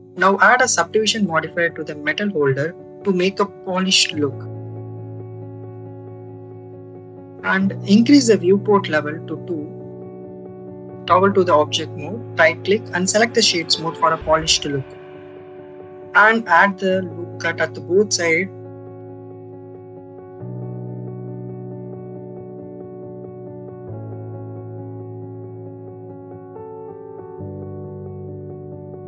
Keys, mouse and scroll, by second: 0.6-3.2 drag, 5.4 ctrl+r, 8.1-10.0 right drag, 10.0 click, 11.7 Tab, 16.6 ctrl+r, 18.9 right click, 19.5 ctrl+b, 20.9 click, 21.6 click, 23.3 ctrl+r, 24.1 right click, 24.7 ctrl+b, 26.4 click, 28.3 click.